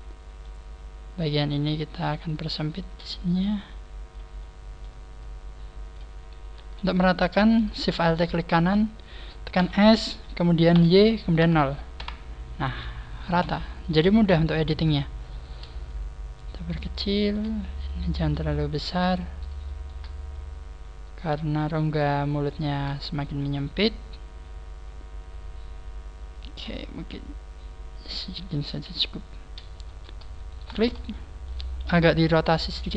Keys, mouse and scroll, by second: 0.6 scroll up 4, 2.1 right click, 2.6 shift+right click, 3.2 click, 4.3 middle click, 5.1 click, 5.2 middle click, 5.2 click, 6.1 scroll up 2, 6.5 a, 8.1 alt+shift+right click, 9.5 s, 12.9 scroll down 1, 13.8 middle click, 14.6 right click, 15.2 shift+right click, 15.8 click, 17.0 shift+middle click, 17.6 right click, 18.7 shift+right click, 19.6 shift+middle click, 20.2 click, 22.4 shift+middle click, 23.0-23.4 scroll down 3, 23.4 shift+middle click, 26.8 scroll down 4, 27.0 middle click, 28.5 scroll down 1, 28.8 KP_3, 28.9 KP_1, 29.2-29.8 scroll up 6, 29.8 a, 30.6 alt+shift+right click, 31.0 shift+middle click, 32.4 shift+middle click, 32.4 r.